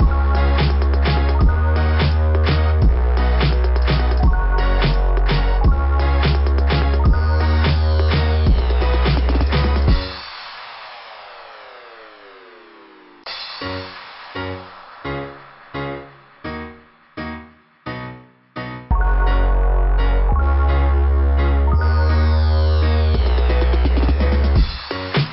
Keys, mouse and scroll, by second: 3.4 click, 14.1 click, 14.3 click, 15.6 click, 15.9 click, 18.4 click, 19.3 click, 19.6 click, 22.0 click, 22.3 click, 22.7 click, 23.6 click, 23.9 click.